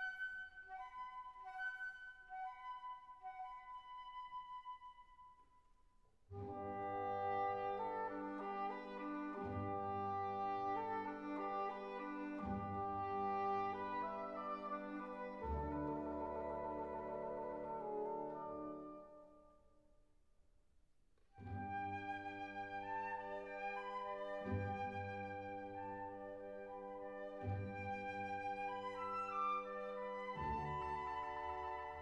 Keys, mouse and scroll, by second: 1.5 click, 4.4 click, 6.2 r, 6.6 z, 11.3 click, 11.9 click, 14.2-15.3 drag, 15.3 super+z, 16.2 click, 17.3 r, 18.0 z, 19.8 click, 21.5 r, 21.7 z, 22.3 click, 29.6 click.